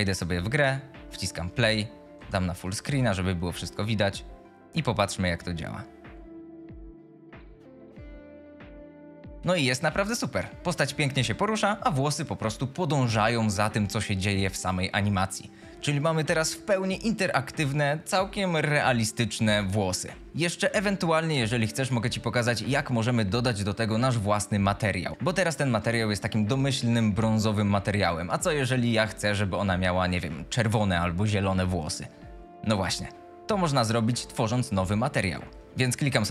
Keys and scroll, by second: 2.1 F11, 2.9 w, 9.3 a, 9.8 w, 34.4 shift+Escape, 35.5-36.2 typing.